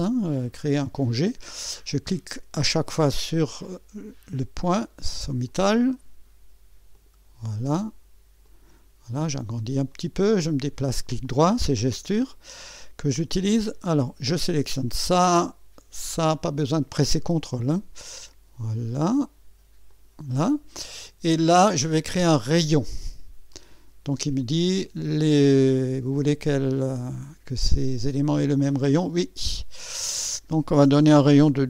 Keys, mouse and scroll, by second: 0.6 click, 3.2 click, 5.5 click, 6.9 click, 8.4 click, 9.2 scroll up 1, 9.9 right click, 13.3 right click, 14.7 click, 16.2 click, 17.5 click, 19.9 click, 23.5 click, 29.1 click.